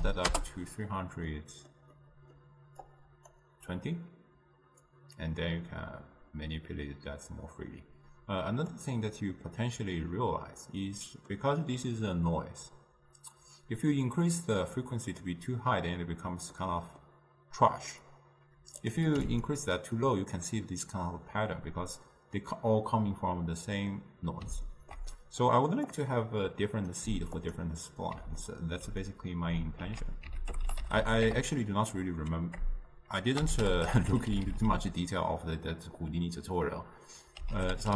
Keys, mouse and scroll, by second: 9.3-14.5 middle drag, 14.5-16.7 drag, 16.7-19.6 middle drag, 19.6 click, 20.1-37.9 middle drag.